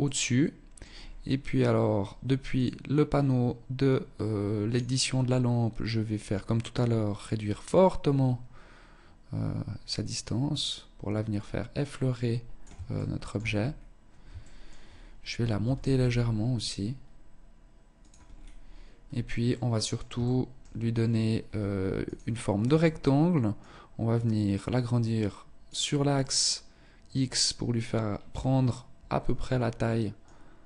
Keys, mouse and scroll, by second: 0.2-0.6 scroll up 4, 1.7 click, 3.0 click, 5.4 click, 12.1 shift+middle click, 12.7-13.4 scroll up 5, 13.5 shift+middle click, 14.7 g, 17.4-17.9 scroll down 4, 18.1 scroll down 3, 18.7 middle click, 19.4 shift+middle click, 20.5-20.9 scroll down 3, 21.2 click, 22.7 click, 25.3 middle click, 29.3 click.